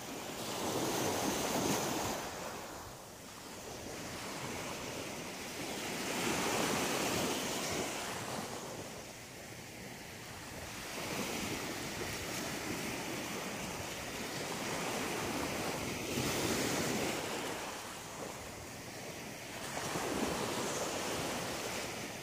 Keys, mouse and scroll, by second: 0.3 click, 3.8 click, 4.4 middle click, 8.5 right click, 8.8 middle click, 9.8 shift+right click, 10.2 shift+right click, 10.5 shift+right click, 11.2 shift+right click, 11.6 shift+right click, 11.9 middle click, 12.9 shift+right click, 13.1 shift+right click, 13.4 shift+middle click, 14.3 shift+right click, 14.7 shift+right click, 15.4 shift+right click, 15.8 shift+right click, 16.5 shift+right click, 17.4 shift+right click, 17.4 shift+middle click, 19.0 click, 19.5 click, 19.8 click, 19.9 click, 20.1 click, 20.3 click, 21.0 middle click, 22.1 shift+middle click.